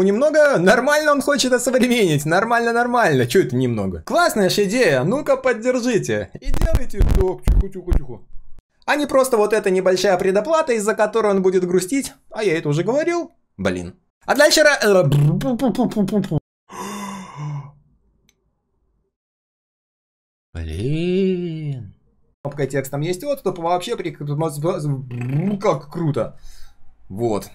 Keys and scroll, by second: 22.4 ctrl+z.